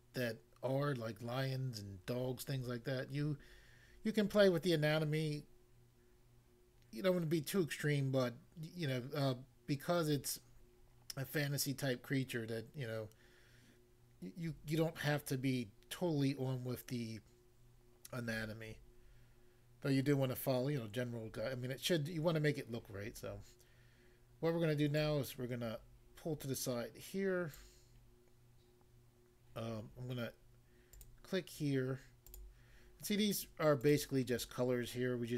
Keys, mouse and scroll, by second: 25.0 click, 27.6 click, 30.9 click, 31.1 click, 32.3 click, 33.8 click, 33.9 click.